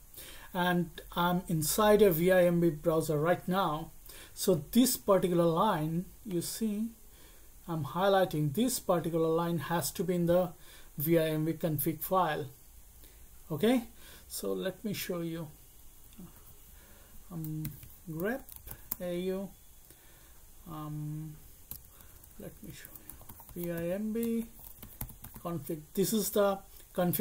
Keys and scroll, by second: 16.3 alt+1, 17.3-19.2 typing, 21.7-25.8 typing.